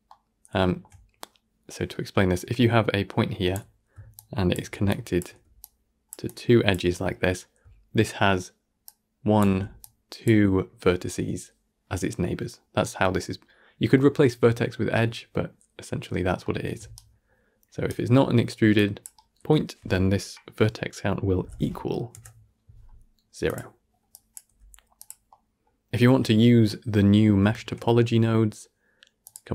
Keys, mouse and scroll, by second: 0.0-2.0 middle drag, 2.0-8.7 d, 8.7-12.3 drag, 12.3 d, 16.3 middle click, 16.6 d, 16.8 right click, 17.8 d, 25.2-27.4 middle drag, 27.4 shift+a.